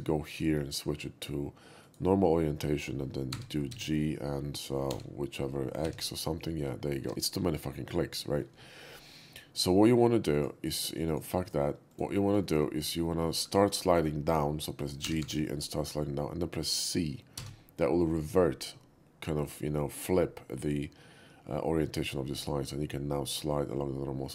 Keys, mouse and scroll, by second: 0.3 click, 1.8 click, 3.3 g, 3.7 z, 3.7 g, 4.9 y, 5.8 x, 10.3 shift+click, 11.1 shift+click, 11.4 shift+click, 11.9 shift+click, 12.4 middle click, 12.8 click, 13.3 shift+middle click, 13.6 shift+middle click, 15.0 g, 15.2 g, 17.3 c.